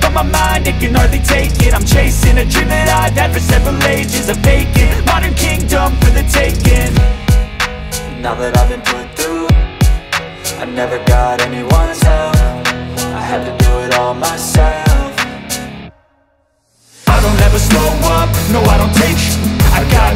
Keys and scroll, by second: 0.6 ], 1.9 super+z, 2.3 super+x, 3.5 x, 8.2 v.